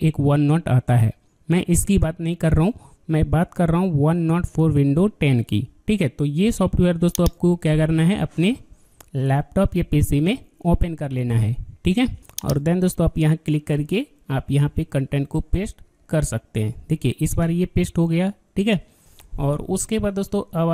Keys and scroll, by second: 14.5 ctrl+v.